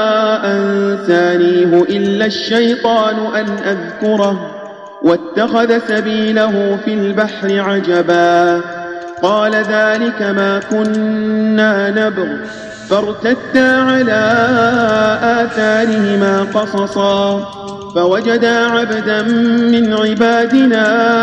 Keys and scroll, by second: 2.5 space, 5.8 space, 9.5 space, 10.8 space, 16.7 space, 17.4 space, 19.1 space, 19.9 space, 20.6 space.